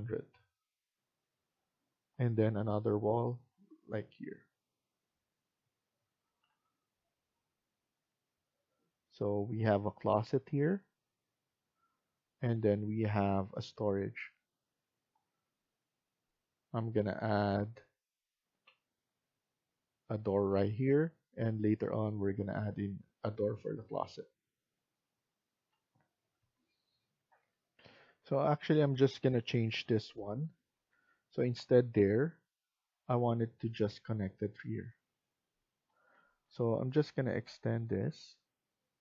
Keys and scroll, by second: 6.1 Escape, 6.4 Escape, 25.4 Escape, 26.3 Escape, 27.7 F1, 30.1 Delete, 30.7 Delete, 36.1 Escape, 36.4 Escape.